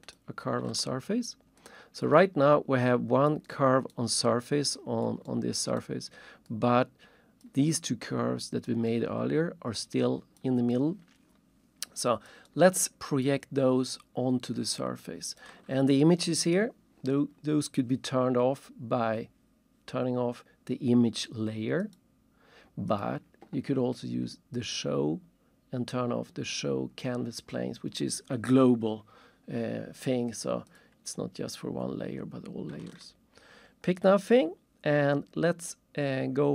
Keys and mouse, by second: 0.1 click, 1.6 alt+shift+click, 3.5 alt+shift+right click, 4.5 alt+shift+middle click, 5.2 alt+shift+right click, 6.5 alt+shift+click, 8.9 alt+shift+click, 10.7 alt+shift+click, 12.5 alt+shift+right click, 15.0 alt+shift+click, 21.8 click, 22.9 click, 24.5 click, 30.6 click, 32.9 ctrl+shift+click, 34.3 ctrl+shift+click.